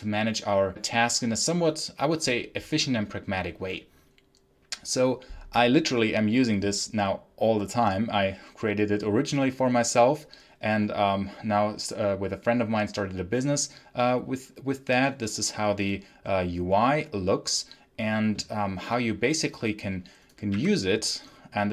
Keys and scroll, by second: 20.4 t.